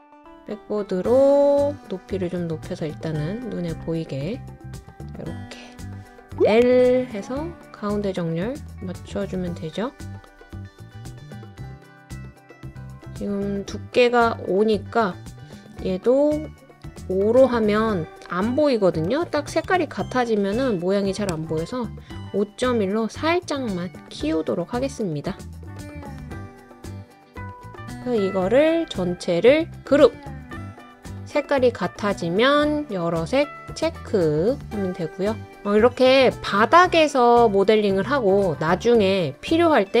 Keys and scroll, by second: 18.8-20.2 typing, 21.3 Return, 22.0-22.8 typing, 26.8-27.5 typing.